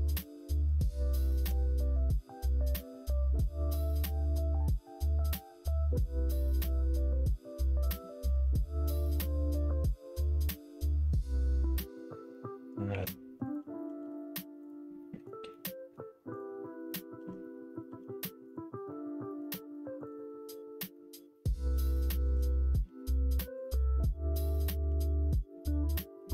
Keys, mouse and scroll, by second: 0.0 1, 0.3 click, 1.1 shift+click, 5.1 m, 6.1 middle click, 6.6 middle click, 7.2 ctrl+z, 7.7 ctrl+z, 7.9 ctrl+z, 8.1 ctrl+z, 8.3 ctrl+z, 8.7 middle click, 9.2 click, 9.9 middle click, 10.8 middle click, 12.8 3, 13.4 click, 13.9 x, 14.9 middle click, 15.4 middle click, 16.2 click, 16.6 middle click, 17.8 x, 18.8 middle click, 20.0 click, 20.2 middle click, 20.9 middle click, 21.4 middle click, 21.9 shift+middle click, 22.4 middle click, 23.8 middle click, 23.8 x, 24.8 2, 25.1 click, 25.4 middle click.